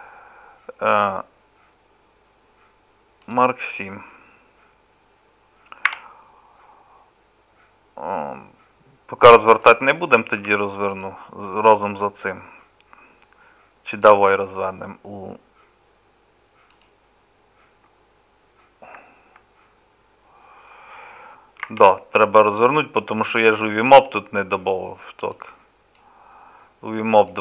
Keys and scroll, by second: 5.9 a, 10.4 Tab.